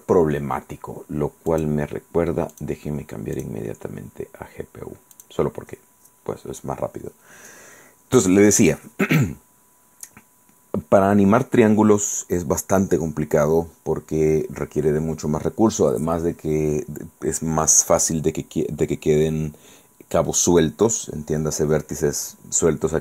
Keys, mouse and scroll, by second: 1.6 click, 2.6 click, 3.5 click, 5.2 click.